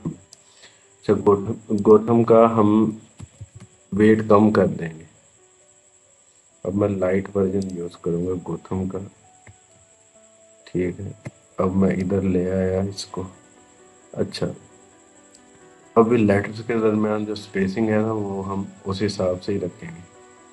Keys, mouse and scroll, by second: 0.1 click, 2.6-3.5 typing, 7.4-20.5 drag.